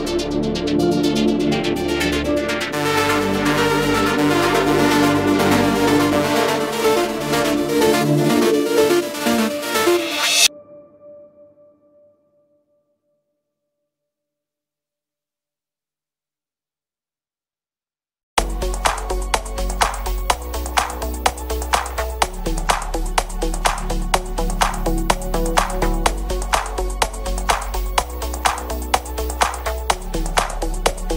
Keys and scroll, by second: 7.3 Delete, 22.6 F3, 23.0 Escape.